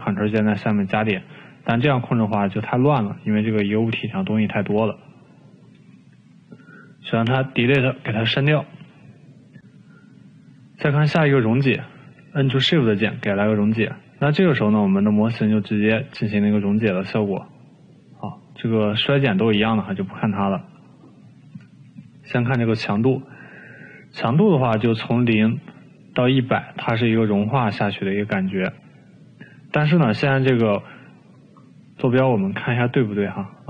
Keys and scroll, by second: 4.3 ctrl+z, 4.6 ctrl+z, 5.0 ctrl+z, 7.7 Delete.